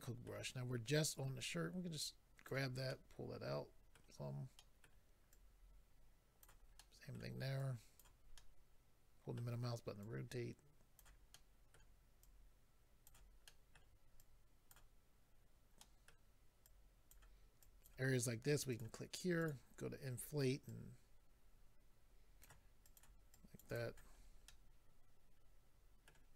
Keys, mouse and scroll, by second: 1.1 click, 2.9 middle click, 4.6 middle click, 6.4 click, 6.7 middle click, 7.5 click, 8.3 middle click, 10.0 click, 11.3 middle click, 12.2 click, 13.5 middle click, 14.2 click, 15.8 middle click, 16.6 click, 17.6 click, 18.7 click, 18.8 click, 19.4 click, 19.5 click, 19.6-20.0 scroll up 2, 20.2-20.7 scroll up 2, 20.7 click, 22.8 click, 23.0 click, 23.3 click, 23.7 click, 23.7 click, 24.2-24.7 scroll down 3, 24.5 middle click.